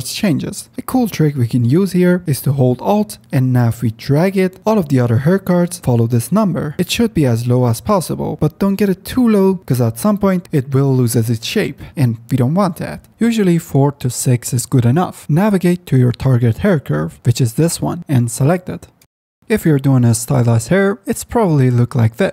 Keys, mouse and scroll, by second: 2.2 alt+click, 13.9 ctrl+alt+z, 17.4 shift+middle drag, 19.4 F10, 20.6 KP_Decimal.